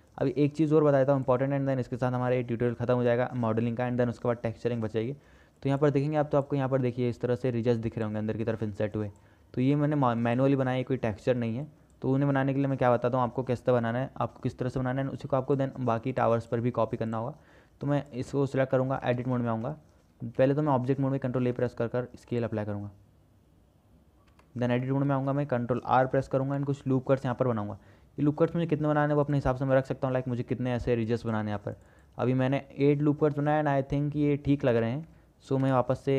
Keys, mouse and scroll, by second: 15.8 click, 16.7 click, 18.2 click, 19.0 shift+click, 19.4 Tab, 19.9 click, 20.6 Tab, 21.6 ctrl+a, 24.6 Tab, 25.0 shift+click, 26.6 ctrl+r, 30.2 click.